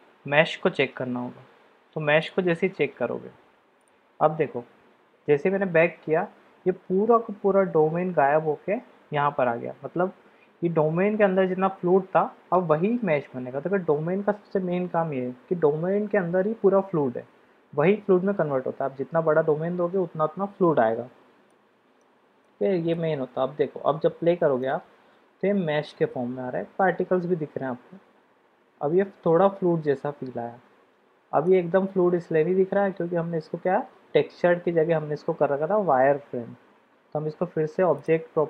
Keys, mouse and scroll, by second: 21.5-22.1 drag, 22.5 middle click, 24.6 click, 31.7 click, 37.9 click.